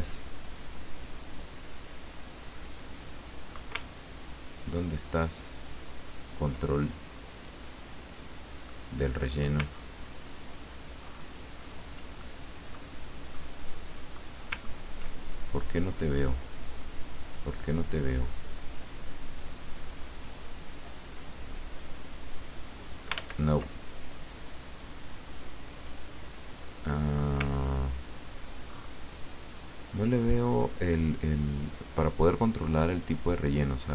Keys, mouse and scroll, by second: 0.0 click, 1.7 click, 2.6 click, 3.9-4.3 ctrl+scroll down 2, 4.8-5.5 ctrl+scroll down 6, 6.0 ctrl+scroll up 2, 7.4 click, 8.7 middle click, 9.7 ctrl+scroll down 2, 11.0-11.4 ctrl+scroll up 1, 11.6-12.1 ctrl+scroll up 1, 12.2 ctrl+click, 13.4-14.4 middle drag, 14.7 ctrl+scroll up 2, 15.3 ctrl+click, 16.5 click, 17.1 click, 20.1 click, 22.1-23.1 drag, 23.1 ctrl+z, 25.7 click, 27.6-27.9 ctrl+scroll down 2, 28.7-29.1 ctrl+scroll up 2, 33.5-33.9 drag.